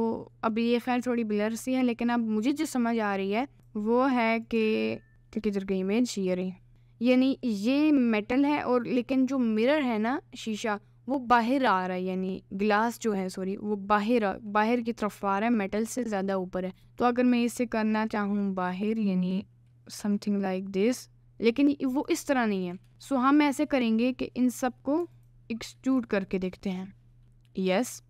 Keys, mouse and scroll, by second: 3.6 click, 4.5 right click, 17.5 right click, 19.0 click, 20.0 g, 25.3 alt+click, 26.4 shift+click, 27.2 e.